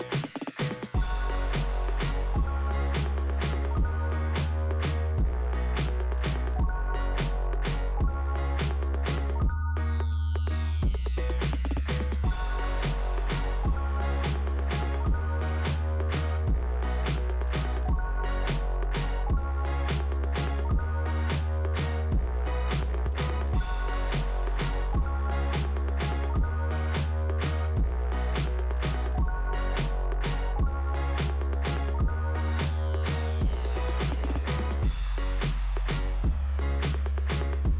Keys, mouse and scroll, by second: 2.1 click, 3.2 click, 3.5 click, 6.6 click, 8.4 click, 8.6 click, 8.8 double click, 9.4 double click, 10.5 click, 13.4 click, 13.5 click, 13.6 click, 13.8 double click, 13.9 double click, 14.1 double click, 14.4 double click, 14.7 double click, 15.2 double click, 17.5 click, 19.0 click, 19.2 double click, 19.3 double click, 19.8 click, 20.1 click, 20.4 double click, 22.0 click, 24.2 click, 24.3 click, 24.3 click, 24.4 click, 26.3-27.4 scroll up 1, 28.6 click, 28.8 click, 29.6 click, 30.1 scroll down 2, 30.8 click, 31.3 scroll down 1, 32.8-33.1 scroll down 1, 33.2 middle click, 34.2 click, 36.7 shift+Return, 37.1 scroll up 2.